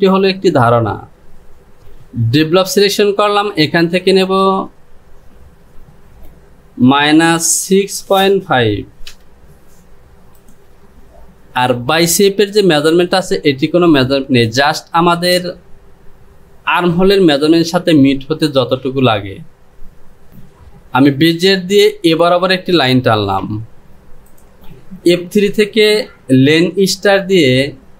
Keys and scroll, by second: 4.7 space.